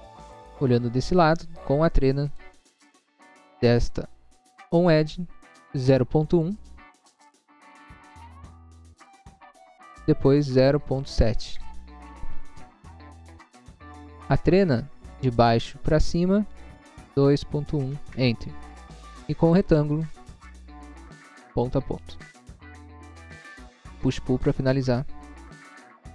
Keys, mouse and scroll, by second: 0.0 scroll up 1, 0.3 middle click, 0.7 middle click, 0.9 scroll up 1, 2.3 click, 3.9 click, 7.0-7.7 typing, 8.0 Return, 9.4 click, 10.5-11.4 typing, 12.1 Return, 15.6 click, 17.2-17.8 typing, 18.1 Return, 19.7 click, 20.8 click, 22.8 click, 24.5 click, 25.4 click, 25.6 click.